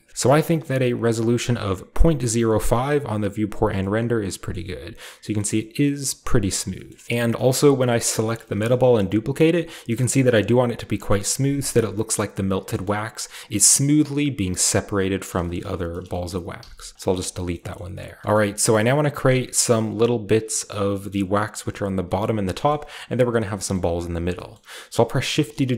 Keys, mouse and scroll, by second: 0.1 Return, 0.2-2.6 shift+middle drag, 3.6-4.5 scroll down 2, 3.7-4.0 middle drag, 4.5-5.1 scroll up 2, 4.5-5.2 middle drag, 5.1-6.4 shift+scroll up 1, 5.4 shift+middle drag, 5.8-6.7 middle drag, 6.4-7.0 scroll down 1, 6.9 shift+middle drag, 7.0 middle click, 8.1 right drag, 8.4 shift+middle click, 8.8 shift+d, 12.4 click, 12.7 middle click, 12.9-13.9 scroll up 2, 13.2 g, 13.9 click, 13.9 scroll up 1, 14.1-15.1 scroll down 1, 14.5 g, 15.1 drag, 15.4-16.0 shift+middle drag, 16.0-17.2 shift+scroll up 1, 16.1-16.6 typing, 17.2-18.2 shift+scroll down 1, 17.5-21.6 shift+middle drag, 18.2 ctrl+b, 18.2-19.1 shift+scroll up 1, 19.1-21.6 scroll up 1, 21.8-22.1 scroll down 2, 22.0-23.3 middle drag, 22.1-24.2 scroll up 3, 23.4 shift+middle click, 23.7-24.3 shift+middle drag, 24.2 scroll down 1, 24.5-25.3 scroll up 1, 24.5-25.7 shift+middle drag, 25.3 shift+d.